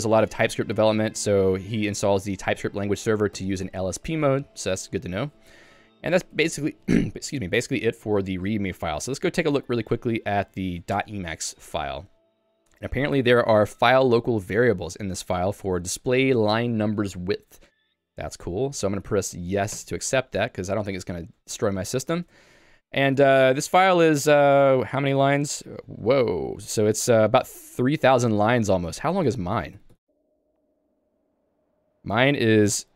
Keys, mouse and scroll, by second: 0.0-2.3 typing, 5.0 j, 11.1 Return, 20.2 y, 21.7 shift+Tab, 21.9 shift+Tab, 23.5 shift+g, 26.1 k, 26.7 j, 27.3 j, 29.8 ctrl+g, 29.9 ctrl+g, 31.7 shift+g.